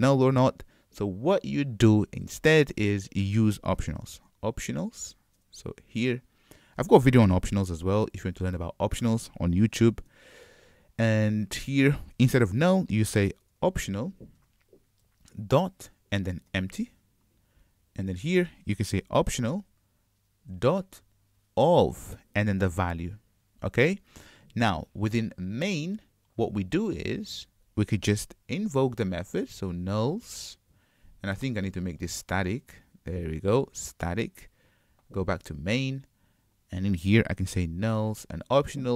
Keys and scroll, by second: 6.1 Return, 14.5 Return, 23.3 shift+super+Return, 34.3 Return.